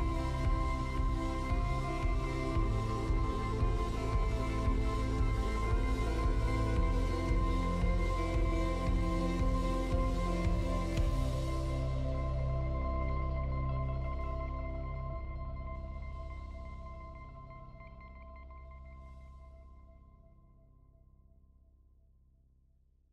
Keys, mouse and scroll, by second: 2.5 click, 4.6-7.9 drag, 12.3 click.